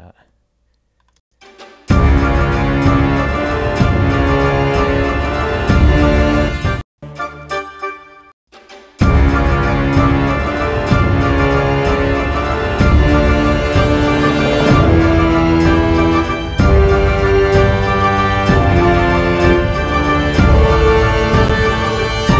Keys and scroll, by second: 1.3 space, 6.5 space, 6.7 ctrl+alt+l, 9.5 space.